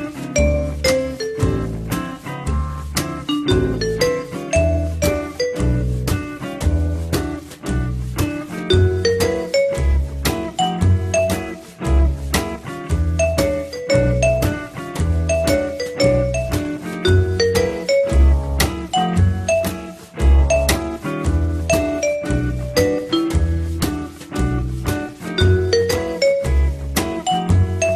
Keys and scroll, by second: 0.8 f, 8.4 l, 15.0-15.8 typing, 17.4 m, 26.7 m.